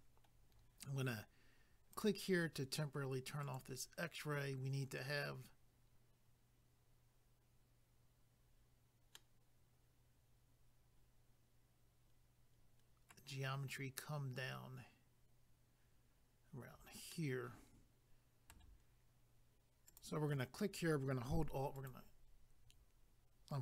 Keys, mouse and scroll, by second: 1.9 click, 2.1 click, 3.4 click, 3.6 click, 9.1 middle click, 17.1 middle click, 19.9 click, 20.0 click, 21.7 alt+click, 21.9 alt+click.